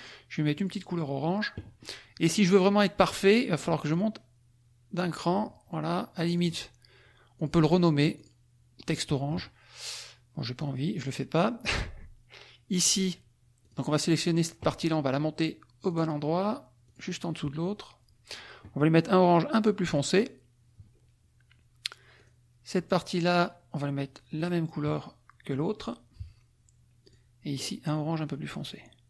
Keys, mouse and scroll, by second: 0.5 click, 3.9 click, 5.0 click, 6.3 click, 7.3 click, 8.1 click, 11.0 click, 13.7 click, 15.9 click, 16.8 click, 17.2-20.3 drag, 22.1 click, 24.5 click, 27.0 click.